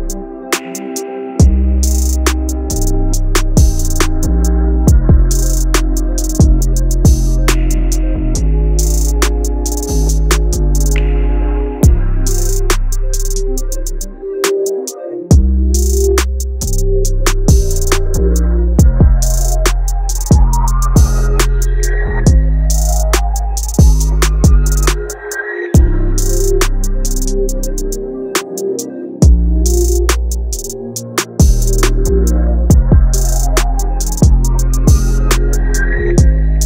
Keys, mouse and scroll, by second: 0.1-11.8 drag, 12.2-15.6 drag, 19.7-20.5 typing, 21.7 click, 23.1 Tab, 24.6 click, 24.8-26.9 typing, 27.7 click, 27.8-31.0 drag, 34.8-36.6 typing.